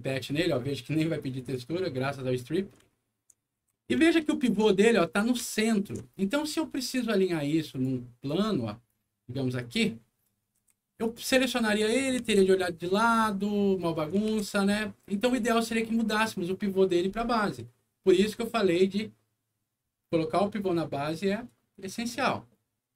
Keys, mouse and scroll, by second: 1.3 alt+click, 2.1 middle click, 2.9 alt+middle click, 3.6 w, 4.0 alt+middle click, 5.4 alt+middle click, 6.7 alt+click, 7.6 alt+click, 8.2 alt+click, 9.5 click, 10.0 scroll down 2, 10.2 scroll up 2, 10.5 w, 11.0 click, 11.9 middle click, 12.3 alt+w, 12.8 alt+scroll up 1, 13.1 alt+middle click, 14.2 alt+w, 15.8 alt+scroll up 1, 22.3 middle click.